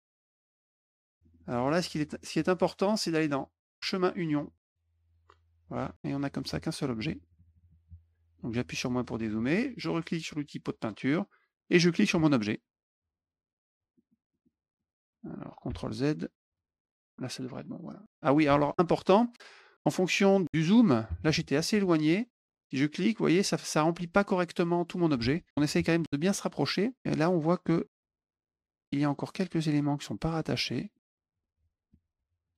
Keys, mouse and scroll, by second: 0.0 click, 0.3 click, 0.8 middle click, 1.2 middle click, 1.3 middle click, 1.5 middle click, 1.7 middle click, 3.7 click, 4.5 click, 5.0 click, 6.3 click, 8.3 middle click, 10.7 click, 12.1 click, 13.9 middle click, 14.2 middle click, 14.7 middle click, 16.4 click, 17.8 middle click, 18.4 ctrl+z, 23.0 click, 26.4 middle click, 30.3 middle click, 30.8 middle click, 32.4 click.